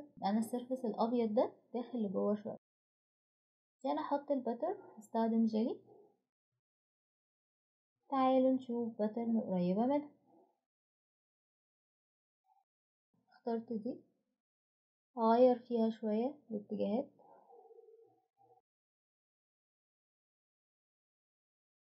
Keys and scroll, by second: 0.0-0.9 typing, 3.8 typing.